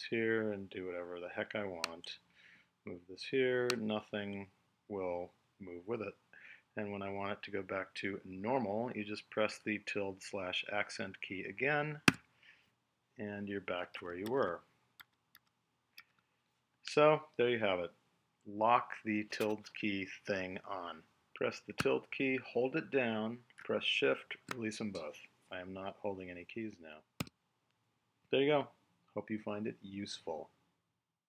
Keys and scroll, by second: 13.9 super+z.